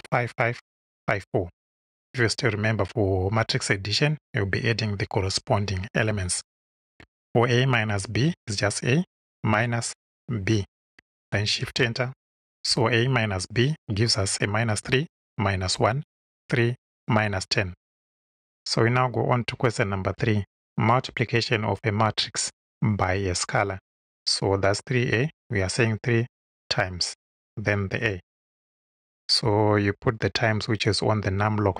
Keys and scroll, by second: 8.2 shift+a, 9.1 shift+-, 10.0 shift+b, 11.6 shift+Return, 25.2 3, 26.2 *, 28.6 shift+a.